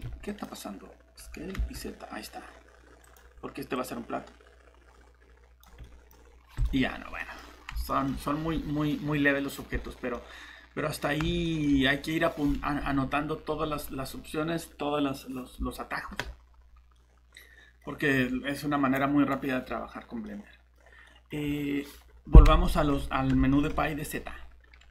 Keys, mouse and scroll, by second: 0.0 Escape, 1.2 s, 1.5 z, 5.8 middle click, 6.1 scroll down 1, 6.6 click, 7.2 middle click, 7.4 scroll up 1, 7.9 middle click, 9.8 scroll down 1, 10.1 middle click.